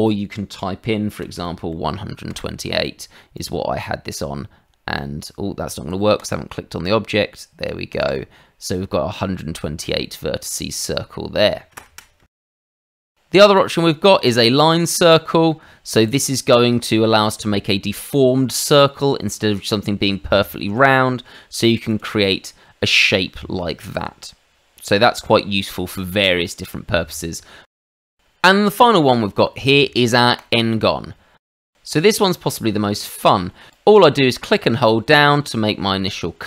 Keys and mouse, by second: 1.2 KP_1, 1.7 KP_8, 2.3 Return, 3.3 click, 5.7 Escape, 6.2 click, 6.8 click, 7.9 click, 8.0 click, 9.1 middle click, 10.8 middle click, 12.3 ctrl+z, 12.6 ctrl+z, 12.8 middle click, 13.0 shift+middle click, 13.4 click, 14.2 click, 21.7 click, 21.8 click, 22.9 middle click, 26.4 middle click, 27.8 ctrl+z, 28.7 click, 30.3 click, 31.5 middle click.